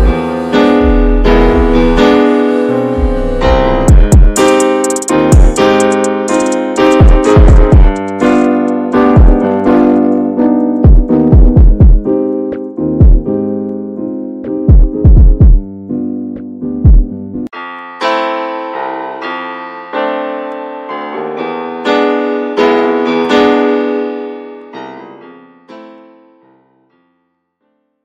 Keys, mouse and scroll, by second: 0.0 scroll down 6, 0.0-2.0 middle drag, 2.0 scroll up 2, 2.3-3.3 middle drag, 3.3-3.7 scroll up 1, 3.7 middle click, 4.4-4.7 scroll up 2, 4.9-8.7 shift+middle drag, 8.7-9.0 scroll down 1, 9.0-13.7 shift+middle drag, 13.7-14.0 scroll down 1, 14.0 middle click, 14.4-14.7 scroll down 1, 14.7 middle click, 15.1 drag, 15.4-15.7 scroll down 1, 15.7-19.6 middle drag, 19.6 ctrl+s, 19.9-23.0 ctrl+middle drag, 23.0-23.3 scroll up 2, 23.3-26.2 shift+middle drag, 26.2 ctrl+s.